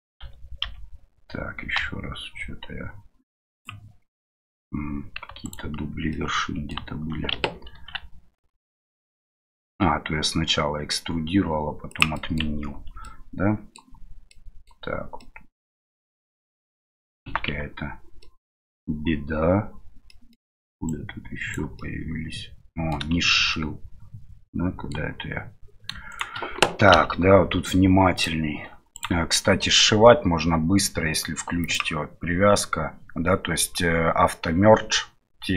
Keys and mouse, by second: 0.2 a, 0.6 a, 4.1 middle click, 5.4 alt+right click, 6.1 middle click, 12.3 middle click, 12.8 Tab, 13.0-13.8 middle drag, 14.3-14.7 middle drag, 15.2-15.7 middle drag, 16.2-17.1 middle drag, 17.2 Tab, 18.2 middle click, 20.1 middle click, 20.9 right click, 21.9-23.0 middle drag, 23.5-24.9 middle drag, 26.1 shift+right click, 28.9 right click, 31.6 click.